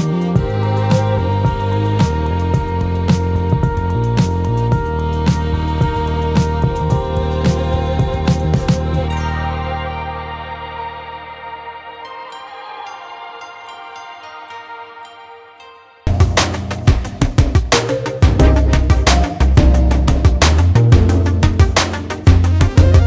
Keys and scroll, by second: 10.4-15.3 ctrl+z.